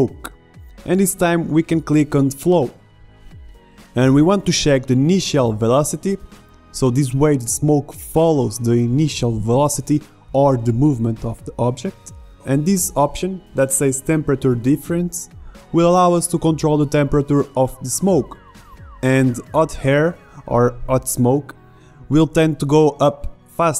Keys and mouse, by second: 0.0-3.3 drag, 3.3 middle click, 5.8-9.2 drag.